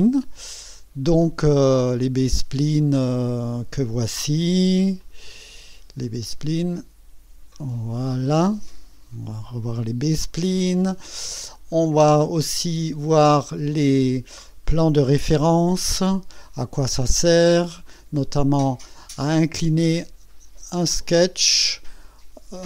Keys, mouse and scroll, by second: 1.6 click, 2.1 space, 4.8 click, 6.0 click, 11.5 click, 15.4 click, 15.8 space, 19.5 click, 20.6 space, 21.9-22.6 drag.